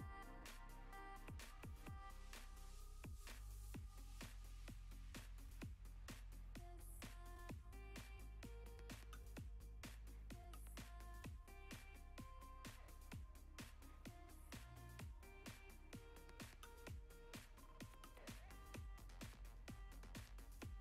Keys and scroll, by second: 8.1 s, 8.9 s.